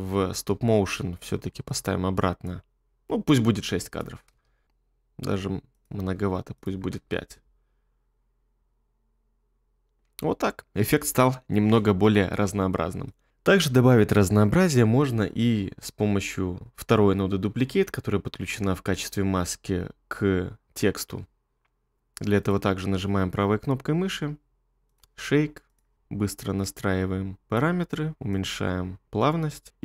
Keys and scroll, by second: 4.4 space, 7.0 space, 29.7 space.